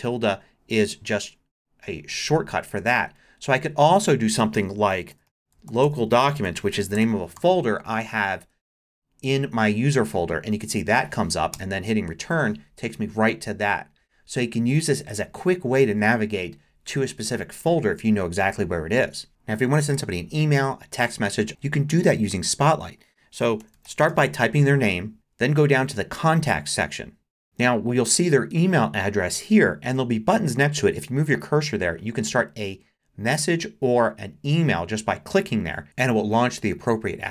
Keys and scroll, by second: 1.1 shift+`, 4.9-7.9 typing, 11.5 Return, 23.4-24.6 typing.